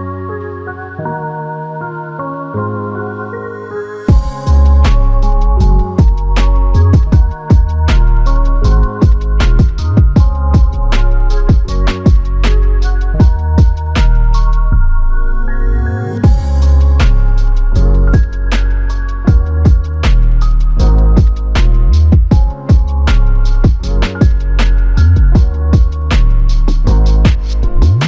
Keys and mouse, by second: 11.5 double click, 14.9 shift+click, 16.9 shift+l, 18.4 shift+click, 20.3-21.6 typing, 27.4 alt+click.